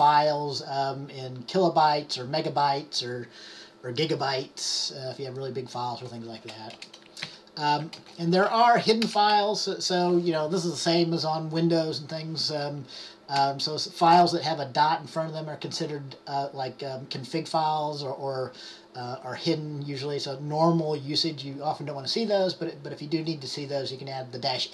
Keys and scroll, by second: 7.4 Up, 8.1-9.4 typing.